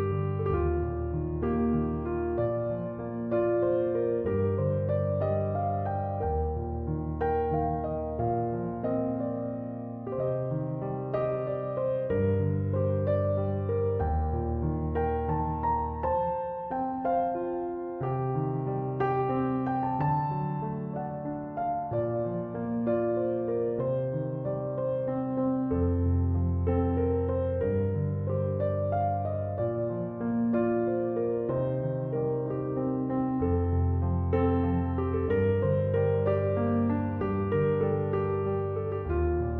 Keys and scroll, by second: 11.5-12.7 typing, 28.3-29.9 typing.